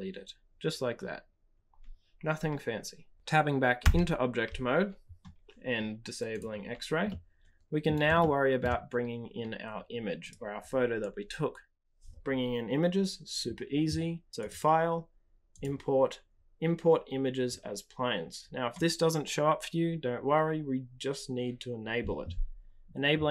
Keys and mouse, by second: 3.1 typing, 5.0 Tab, 6.3-6.8 drag, 7.0-7.8 middle drag, 8.1-8.5 shift+middle drag, 10.2 click, 14.5-22.1 drag.